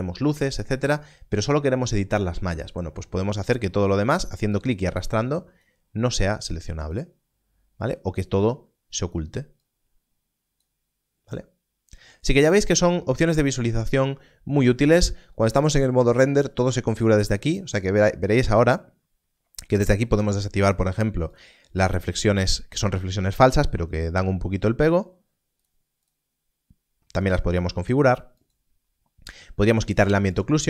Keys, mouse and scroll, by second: 4.6 click, 19.6 click, 27.1 click.